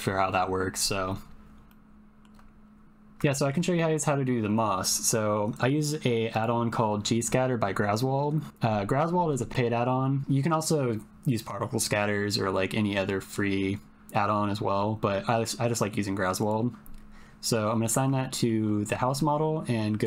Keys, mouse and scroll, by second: 1.7 shift+click, 3.3 shift+middle click, 3.7 middle click, 6.3 click, 18.2 shift+middle click, 20.0 click.